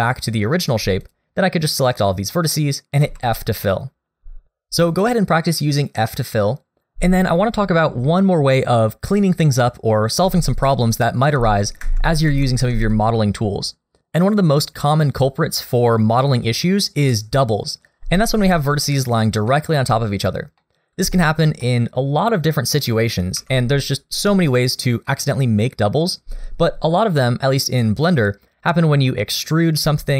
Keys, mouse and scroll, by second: 1.0 shift+click, 1.9 shift+click, 2.3 middle click, 3.0 f, 10.2 ctrl+z, 11.4 ctrl+z, 11.8 ctrl+z, 12.3 ctrl+z, 18.7 middle click, 19.5 shift+middle click, 20.0 scroll up 1, 20.6 middle click, 21.1 shift+middle click, 21.6 middle click, 23.4 3, 27.0 click, 29.2 middle click.